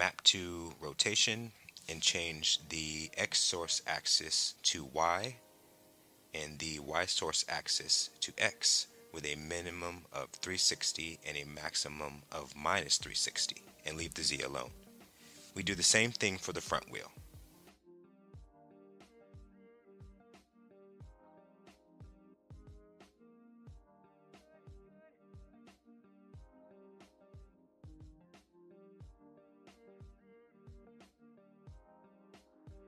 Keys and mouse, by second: 0.1 click, 1.4 click, 2.7-4.1 drag, 5.2 click, 6.6 click, 8.2-9.2 drag, 9.5-15.6 drag, 17.1 click, 18.8-20.4 drag, 22.1-23.1 drag, 23.7 click, 24.5-25.5 drag, 26.2-27.4 drag, 28.6 click, 30.2-32.8 drag.